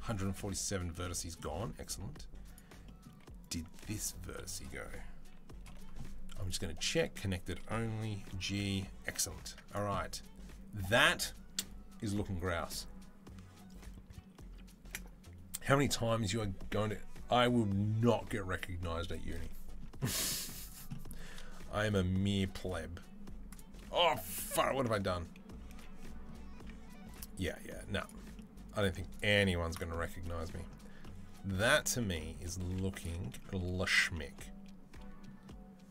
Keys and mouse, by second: 1.4 Tab, 1.8 Tab, 3.3 click, 3.3-6.3 middle drag, 3.6 g, 5.5 o, 6.3-9.6 drag, 8.0 g, 9.3 Tab, 9.6-20.5 middle drag, 20.5 click, 20.6-22.4 middle drag, 22.2 space, 22.4 Tab, 22.4-33.5 right drag, 25.6 ctrl+z, 26.4 Tab, 31.5 Tab, 32.5 2, 32.8 alt+click, 33.6 alt+click, 33.6 alt+middle click, 33.6 alt+right click, 33.9 right click.